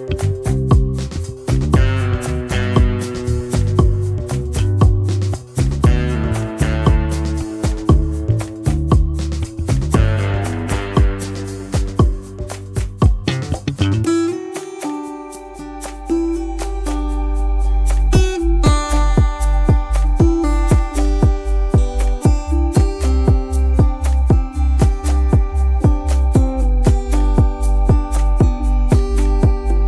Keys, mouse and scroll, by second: 1.8 space, 2.3-2.6 scroll down 1, 2.6 space, 3.0 double click, 3.1 space, 6.2 double click, 6.9 ctrl+z, 11.4 space, 14.7 t, 15.6 End, 15.8 Delete, 16.2 space, 21.7 double click, 21.8 space, 22.6 scroll up 1, 27.4 space, 27.8 double click, 27.9 space, 28.5 double click, 28.7 space, 29.5 double click, 29.7 space.